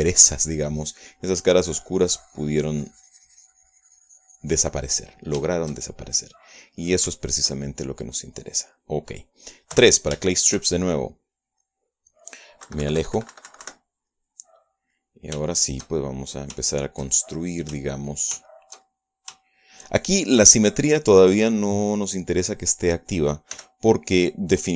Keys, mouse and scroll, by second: 0.3-5.9 shift+drag, 5.9 middle click, 6.5 shift+middle click, 8.1-10.1 shift+middle drag, 10.8 3, 11.3-13.0 shift+middle drag, 13.7 KP_Subtract, 15.2 middle click, 16.4 shift+middle click, 16.5-17.6 shift+middle drag, 17.6-19.4 shift+middle drag, 19.5-21.0 shift+middle drag, 21.3 shift+right click, 24.6 f.